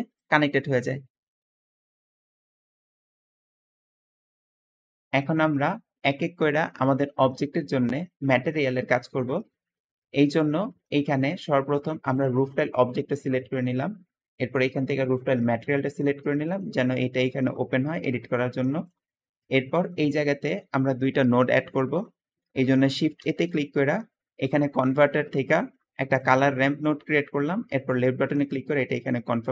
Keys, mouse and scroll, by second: 0.1 click, 11.6 g, 16.3 `, 17.1 click, 18.1 Escape, 18.9 middle click, 19.5 middle click, 23.1 shift+a.